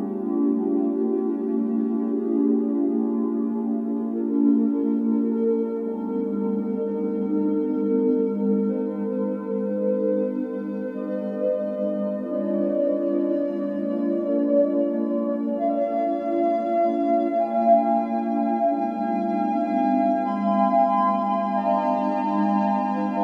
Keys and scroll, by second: 0.4 typing, 1.2 Return, 2.9-3.7 typing, 5.6 Escape, 6.3-6.7 typing, 13.6 Escape, 15.7 typing, 17.0-17.8 typing, 19.7 Escape, 21.3 Escape.